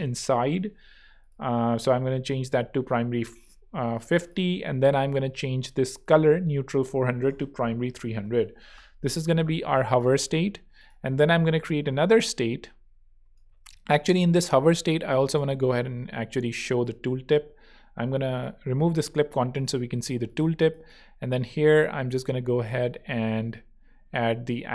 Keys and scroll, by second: 7.3-8.3 typing, 14.4 shift+super+z, 15.4 0, 19.0 v.